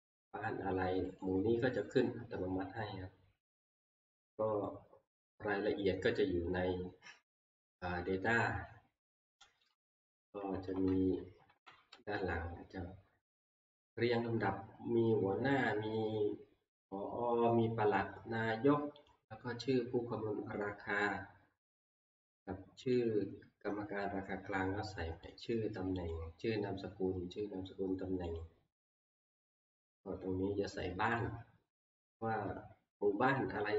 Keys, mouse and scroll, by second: 1.2 click, 1.8 click, 8.4 click, 9.7 click, 10.4 Right, 10.6 Right, 10.9 Right, 11.1 Right, 11.5 Right, 11.6 Right, 11.9 Right, 13.6-14.8 drag, 19.1 click, 19.5-19.8 scroll down 3, 22.1-23.0 scroll, 23.0 click, 23.7 scroll, 25.3 click, 26.1 click, 28.4 click, 28.8 scroll, 29.9-30.2 scroll, 31.2 click.